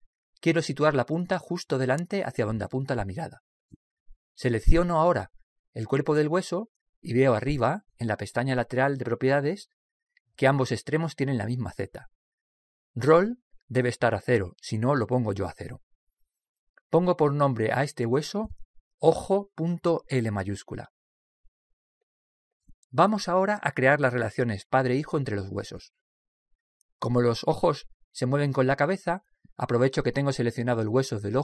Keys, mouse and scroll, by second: 5.6-7.2 middle drag, 5.6-5.9 scroll up 1, 7.2-9.0 drag, 9.0 right click, 9.5 click, 16.8 click.